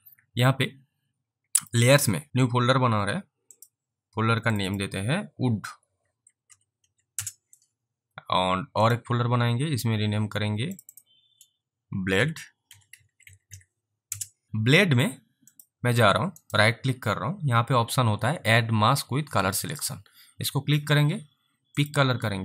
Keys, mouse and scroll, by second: 3.6 click, 5.6-7.3 typing, 8.8 Return, 8.9 click, 10.8 click, 10.9 double click, 12.2-14.0 typing, 14.1 Return, 15.6 click, 16.5 right click, 19.7 click, 21.8 click.